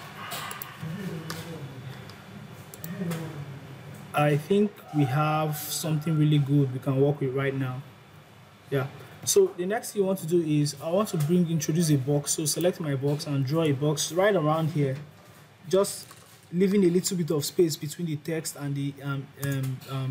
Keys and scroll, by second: 5.1 Down, 5.5 Right, 8.0 Up.